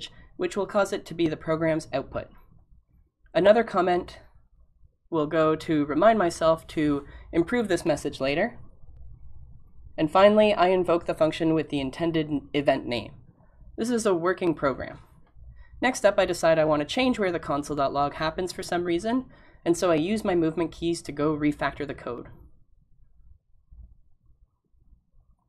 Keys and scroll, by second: 5.9 b, 9.3 *.